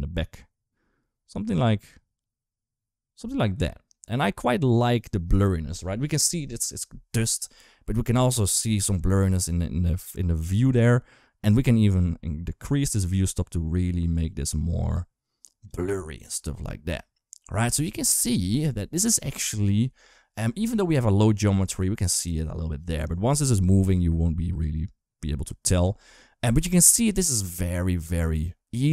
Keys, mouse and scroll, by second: 11.4-15.5 shift+drag, 16.8 ctrl+s, 23.6 space, 23.9 space, 24.3 space, 25.6 space, 26.7 space, 27.8 space.